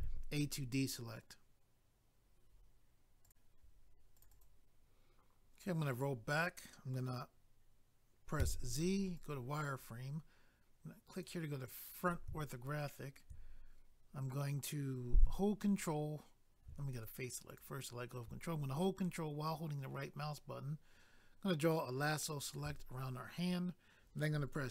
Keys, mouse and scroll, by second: 4.2 click, 4.2 click, 4.3 click, 4.4 double click, 4.8 scroll down 1, 9.1 click, 9.3 click, 11.1 click, 11.2 click, 12.5 shift+middle click, 17.5 click, 17.6 click, 19.8 ctrl+right click.